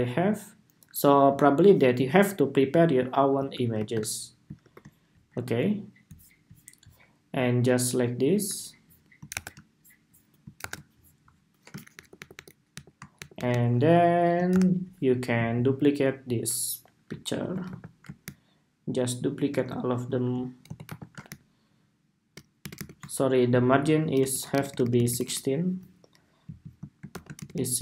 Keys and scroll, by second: 3.5 shift+super+v, 4.3 super+2, 9.0 super+=, 10.3 super+=, 14.2 super+-, 17.1 super+c, 17.4 super+v, 20.3 super+c, 20.6 super+v, 24.0 alt+shift+Left, 24.3 alt+Right, 24.4 alt+Right, 24.6 alt+Right, 24.8 alt+Right, 25.0 alt+Right, 26.3 alt+Right, 26.8 alt+shift+Left, 27.1 alt+Right, 27.3 Tab.